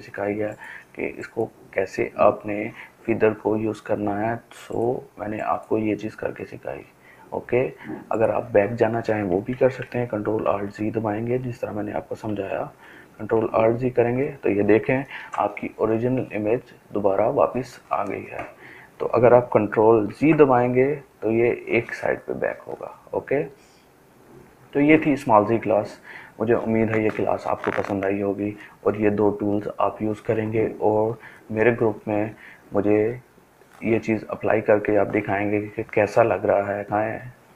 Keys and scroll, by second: 9.0 ctrl+alt+z, 9.9 ctrl+alt+z, 10.9 ctrl+alt+z, 11.4 ctrl+alt+z, 12.0 ctrl+alt+z, 13.8 ctrl+d, 18.7 ctrl+z.